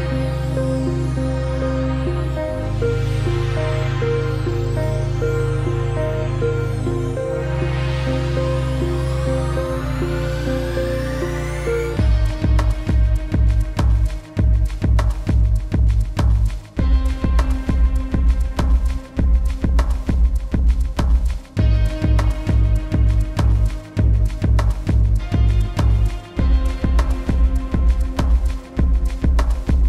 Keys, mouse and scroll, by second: 3.3 alt+scroll up 2, 4.1 click, 5.9-6.3 scroll down 1, 6.3 click, 7.2 ctrl+z, 7.8 click, 8.0 z, 8.9 click, 10.0 click, 10.3 v, 10.9 click, 12.0-12.9 alt+scroll down 3, 12.4 click, 12.5 space, 13.0 click, 13.3 alt+scroll up 1, 13.6 click, 14.0 space, 14.1 t, 14.4 click, 15.3-16.4 typing, 17.0 click, 19.6 click, 21.9-22.4 scroll up 1, 22.4 click, 25.1 click, 26.0-26.4 scroll down 1, 26.4 click, 27.8 scroll down 1, 28.9 scroll down 1.